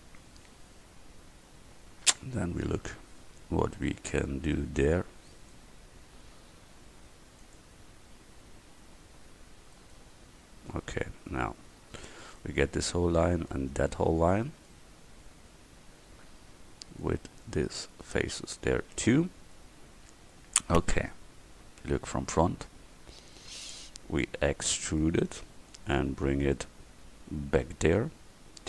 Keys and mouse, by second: 9.8-10.8 right drag, 11.0-14.3 middle drag, 14.4-17.1 middle drag, 21.9 KP_1, 24.8 e, 25.8-28.0 drag.